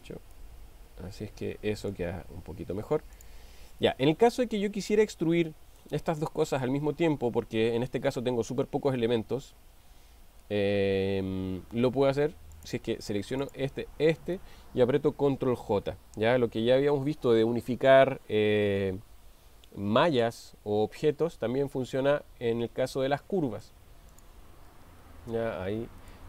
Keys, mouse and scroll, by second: 0.7-2.1 middle drag, 3.2 click, 5.9-6.8 middle drag, 12.5 click, 15.8 ctrl+j, 23.6 middle drag, 24.2 click, 25.0 g.